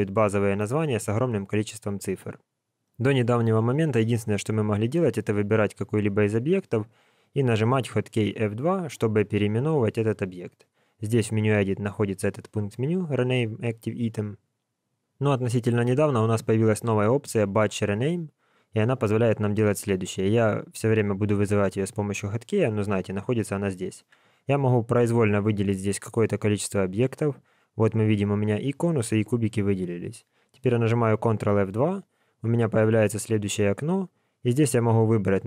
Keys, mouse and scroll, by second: 0.9-2.7 scroll up 1, 5.0 click, 8.2 F2, 10.9 click, 23.5 click, 25.0 click, 31.6 ctrl+F2.